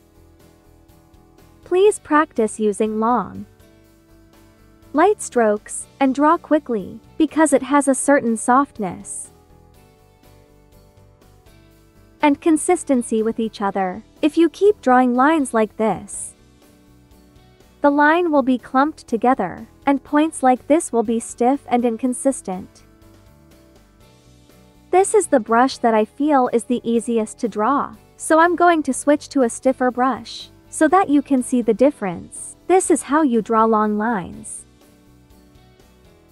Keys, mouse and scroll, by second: 14.5 click, 29.0 click, 30.4 space, 30.5 click, 31.0 space, 32.2-36.3 drag.